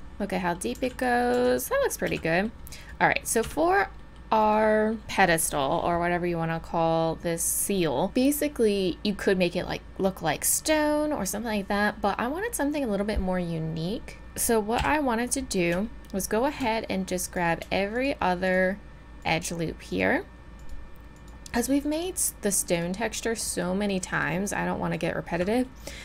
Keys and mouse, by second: 0.7 z, 1.3 middle click, 1.3 z, 2.1 z, 3.5 Tab, 14.2 Tab, 14.8 KP_7, 17.9 click.